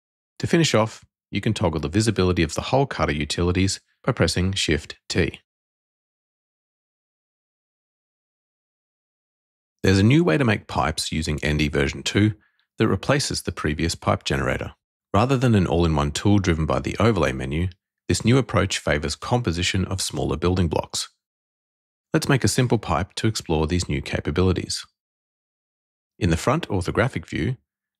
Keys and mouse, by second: 0.1-0.7 drag, 0.7 middle click, 3.1 shift+t, 3.9 middle click, 4.7-5.3 drag, 5.3 middle click, 27.0 f.